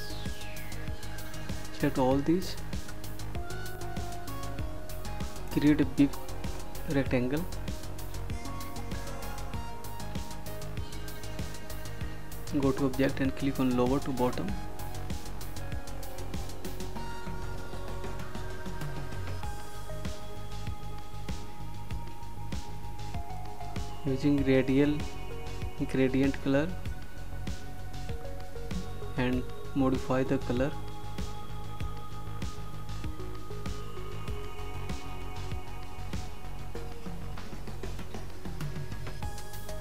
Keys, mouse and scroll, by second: 1.8 ctrl+d, 3.7 click, 7.4 click, 11.9 click, 19.9 click, 25.6 click.